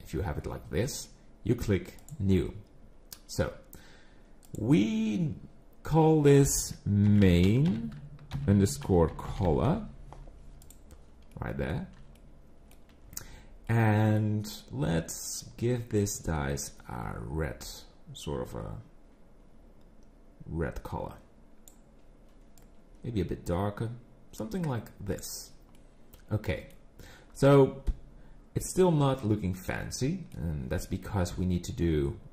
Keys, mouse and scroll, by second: 2.0 click, 11.3 middle click, 12.2 shift+middle click, 13.7 middle click, 15.3 click, 25.8 middle click, 28.6 middle click.